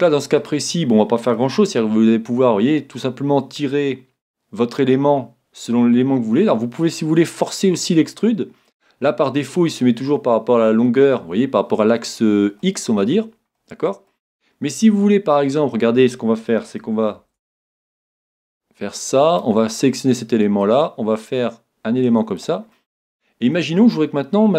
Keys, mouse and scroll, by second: 0.4-2.1 right drag, 1.0-2.9 middle drag, 1.9 e, 8.8-10.6 drag, 9.1-11.0 middle drag, 12.2-15.3 middle drag, 15.4-17.2 middle drag, 17.2 ctrl+Tab, 19.3-21.0 right drag, 19.7-21.3 middle drag, 20.6-22.4 drag, 21.4 middle click, 22.7-24.5 middle drag.